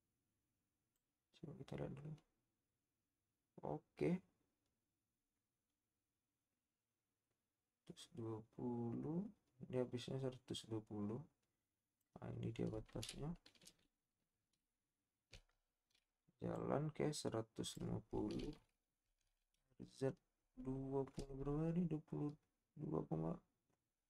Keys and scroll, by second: 15.5 \, 19.2 z.